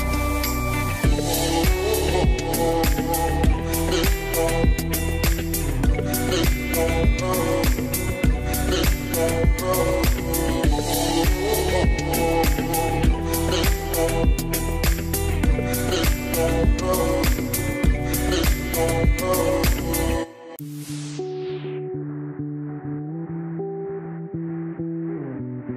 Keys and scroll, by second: 11.1 BackSpace, 11.5 6, 11.6 Return, 20.9 2, 21.1 Return, 22.7 5, 22.9 Return.